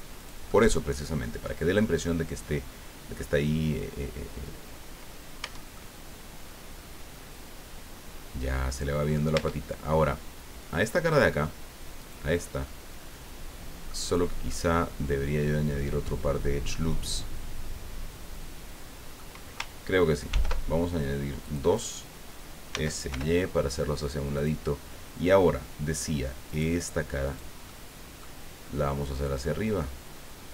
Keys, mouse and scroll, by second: 0.2 click, 2.0-3.3 middle drag, 5.4 Tab, 5.7-9.3 middle drag, 9.3 Tab, 11.1 click, 12.0 right click, 12.6-14.0 middle drag, 14.5-19.7 middle drag, 20.3 ctrl+r, 20.8 ctrl+scroll up 2, 21.4 click, 22.7 s, 23.1 y, 24.3 click, 26.5 click, 27.2 right click, 27.7 middle click, 29.2-30.5 drag.